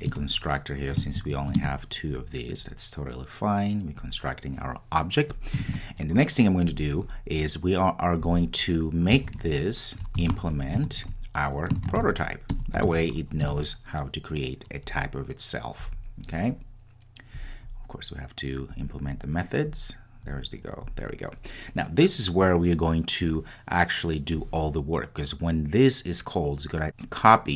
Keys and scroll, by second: 10.9 Return.